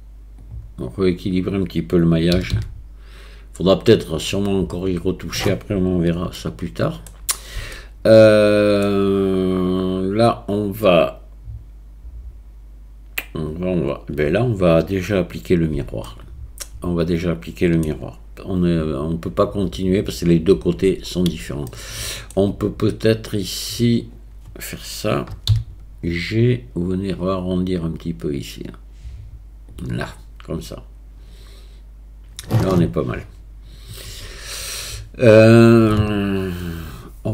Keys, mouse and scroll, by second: 2.4 g, 6.4 shift+click, 7.8 shift+click, 16.2 shift+click, 16.8-17.8 shift+middle drag, 21.7 shift+middle click, 25.5 g, 34.1 a.